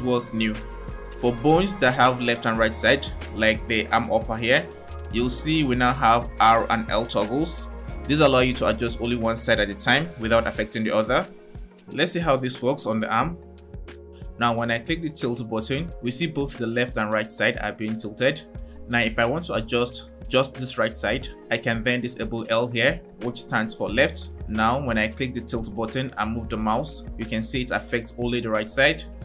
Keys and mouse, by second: 0.6-4.1 drag, 15.5 click, 18.0 click, 22.7 click, 24.9 drag, 28.6 click.